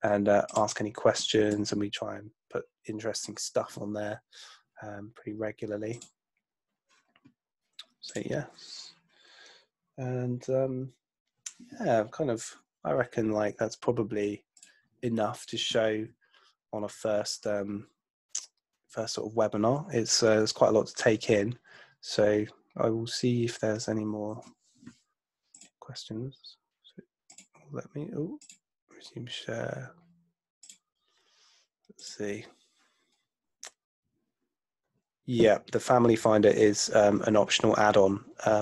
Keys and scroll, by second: 2.0 super+Tab.